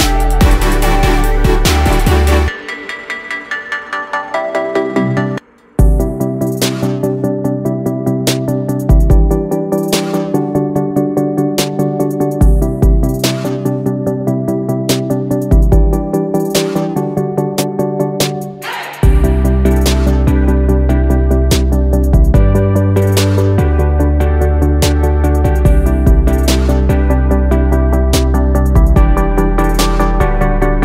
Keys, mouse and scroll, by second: 3.4 click, 4.5 click, 6.9 g, 8.4 click, 8.9 click, 9.6 click, 10.1 click, 14.1 ctrl+z, 17.2-19.2 drag, 21.9-24.4 drag, 25.9 click, 27.5-29.8 drag, 29.8 ctrl+z, 30.0 ctrl+z.